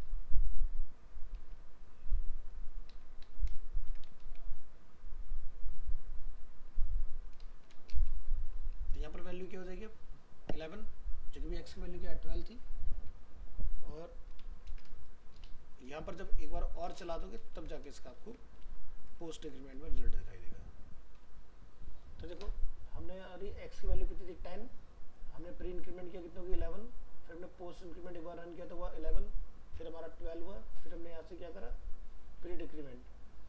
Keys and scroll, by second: 17.6 ctrl+c, 18.1 ctrl+Return, 18.2 ctrl+v, 20.2 alt+Tab.